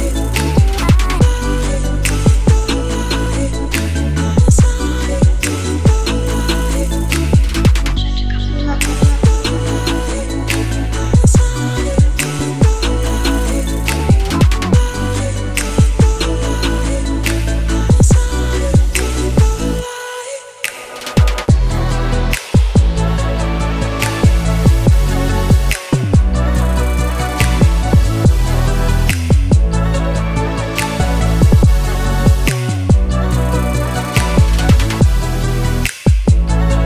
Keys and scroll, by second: 1.8-3.3 typing.